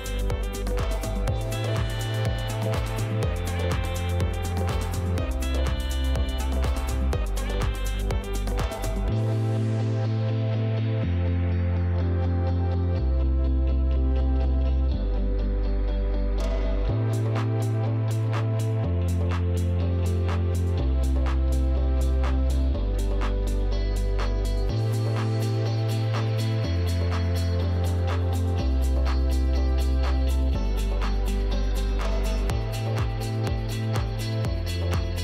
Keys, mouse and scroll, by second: 6.7 click, 8.6 click, 11.1 click, 12.6 click, 14.6 click, 15.3 click, 15.9-18.2 typing, 17.4 click, 17.7 click, 18.7 Return, 19.9 typing, 20.0 click, 21.7 click, 24.7 click, 28.8 click, 29.5 click, 30.1-31.4 middle drag, 30.1 right click, 31.8-32.6 typing, 33.6 click.